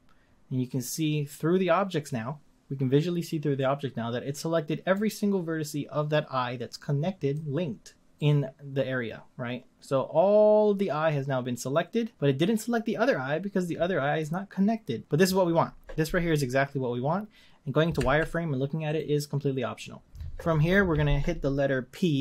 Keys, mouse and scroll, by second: 2.8 scroll down 1, 4.9-7.9 middle drag, 8.1-11.1 middle drag, 18.0 z.